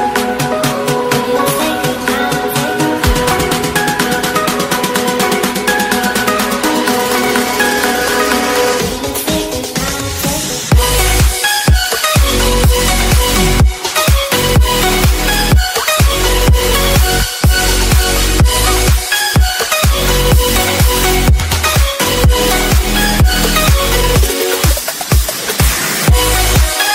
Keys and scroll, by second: 24.7 ctrl+r.